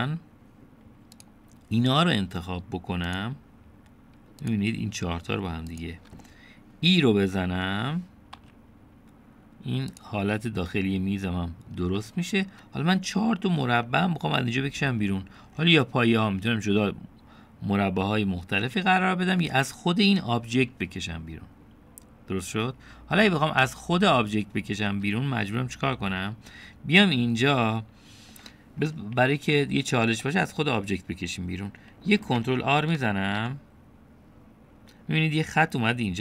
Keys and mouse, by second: 2.2 click, 7.3-8.4 drag, 9.4 e, 11.5-12.8 drag, 14.2 click, 28.0-29.4 middle drag, 31.3-32.8 middle drag, 34.2 ctrl+r.